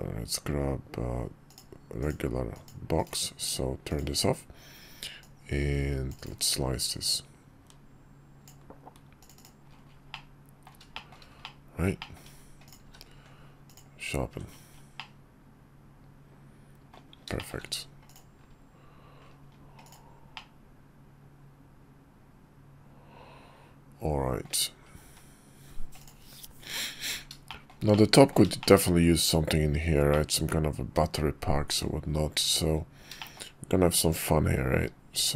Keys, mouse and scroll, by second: 3.6 click, 4.9-6.0 drag, 6.6-9.0 drag, 9.8-10.4 middle drag, 10.6 shift+middle click, 11.1-11.6 middle drag, 11.7 shift+middle drag, 12.4 click, 12.5 q, 14.7-16.7 middle drag, 17.1 shift+middle click, 17.8 click, 19.6-20.1 drag, 20.1-24.1 middle drag, 25.7 click, 27.2 shift+middle click, 27.6 middle click, 28.3 shift+middle click, 29.8-31.6 middle drag, 32.8 `, 32.9 shift+middle drag, 34.9 d.